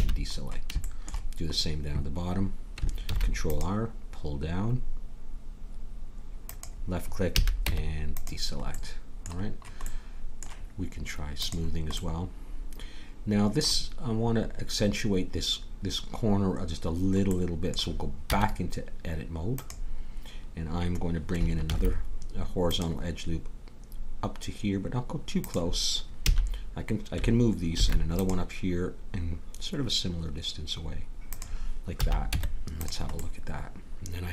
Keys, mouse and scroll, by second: 3.1 ctrl+r, 7.3 a, 7.6 Tab, 8.8-9.9 middle drag, 11.4-12.9 right drag, 12.9-15.6 middle drag, 17.3 middle click, 18.2 Tab, 21.7 ctrl+r, 26.3 a, 27.7 ctrl+r, 31.9 a, 32.3 Tab.